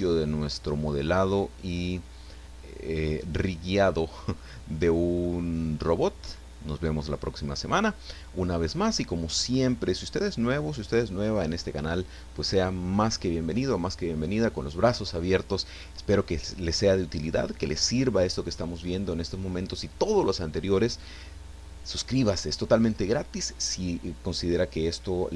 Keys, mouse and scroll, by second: 4.8 scroll down 1, 5.2-8.6 middle drag, 9.3-9.6 scroll up 1.